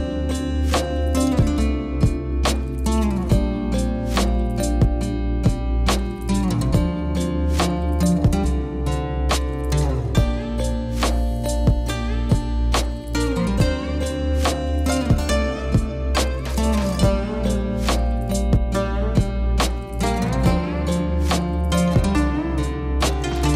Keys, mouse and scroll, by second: 1.3-2.7 drag, 3.2 click, 4.5 Tab, 4.9 Tab, 6.0 Tab, 6.0 click, 6.3 alt+click, 6.6 alt+shift+click, 7.2 alt+shift+click, 7.4 click, 7.9-8.4 alt+shift+drag, 8.7-9.3 alt+shift+drag, 9.5 alt+shift+click, 9.7 middle click, 10.4 alt+shift+click, 10.9 middle click, 11.4 alt+shift+click, 11.9 alt+shift+click, 12.1 alt+shift+click, 12.2 alt+shift+click, 12.5-13.7 alt+shift+drag, 13.9 middle click, 14.3 alt+shift+click, 14.8 alt+shift+click, 15.7 middle click, 16.1 alt+shift+click, 16.4 middle click, 17.0 middle click, 17.3 alt+shift+click, 17.9 middle click, 18.6-19.1 drag, 19.9 Tab, 20.4 n, 20.9 click.